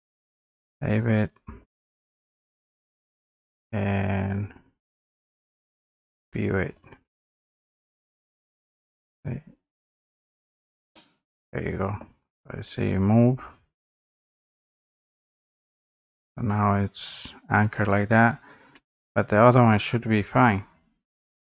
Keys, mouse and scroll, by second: 0.7 click, 1.7 click, 5.9 click, 6.8 click, 8.5 middle click, 8.6 middle click, 9.9 click, 10.2 scroll, 10.2 scroll up 4, 12.0 middle click, 12.6 click, 13.0 scroll up 1, 13.4 scroll, 13.4-13.8 scroll down 6, 13.8 scroll, 15.2 scroll up 4, 16.4 click, 18.8 click, 19.8 click, 21.1 click, 21.4-21.5 scroll down 8.